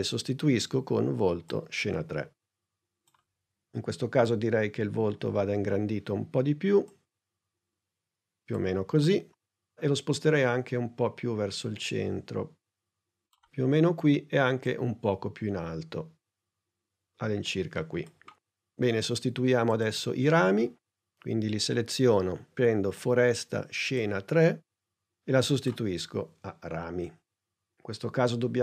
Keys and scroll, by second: 5.0 s, 9.9 p, 27.4 s.